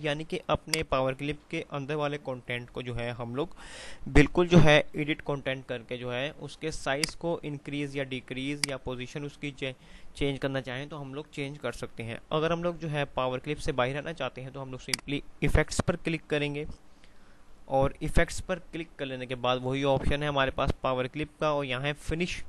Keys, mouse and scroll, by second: 7.1-12.0 drag, 15.0 click.